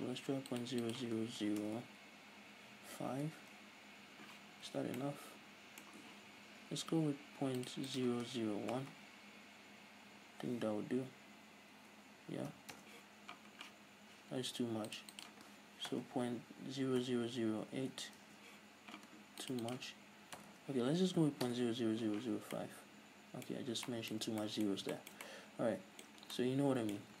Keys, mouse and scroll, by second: 0.6-5.0 drag, 1.8 BackSpace, 3.6 Return, 4.8 z, 5.0-7.7 middle drag, 7.7-22.6 drag, 9.0 BackSpace, 12.9 Return, 16.1 BackSpace, 18.4 Return, 20.6 BackSpace, 21.7 Return, 22.6-27.2 middle drag, 23.8 scroll up 1, 26.3 scroll down 2, 27.1 a.